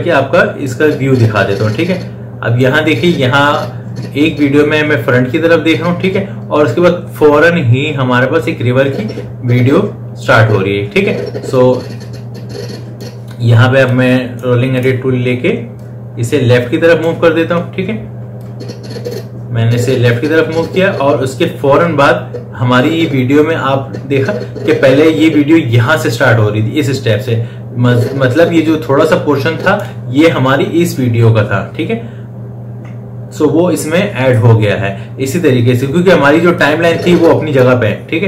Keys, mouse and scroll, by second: 1.0-28.7 drag, 36.9-38.2 drag.